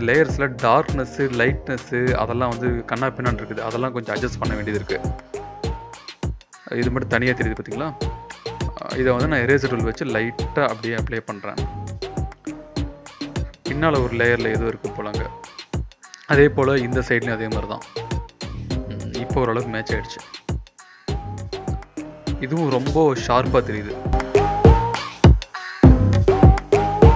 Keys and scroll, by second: 0.3 Return, 0.7 ctrl+b, 2.5 Return, 3.5 Tab, 4.8 v, 6.0 ctrl+z, 7.7 e, 10.2 [, 10.4 [, 10.5 [, 15.1-16.3 typing, 19.6 v, 22.2-23.6 typing, 25.9 v.